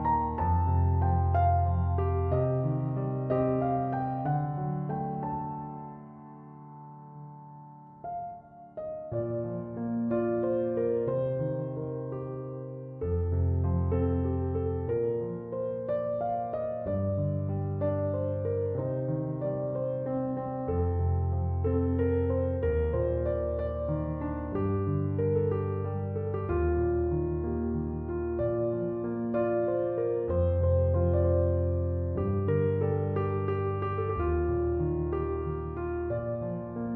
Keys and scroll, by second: 1.3 3, 1.6 Return, 15.7 Return, 22.9 0, 23.1 Return, 26.6 1, 26.8 8, 27.1 0, 27.4 Return.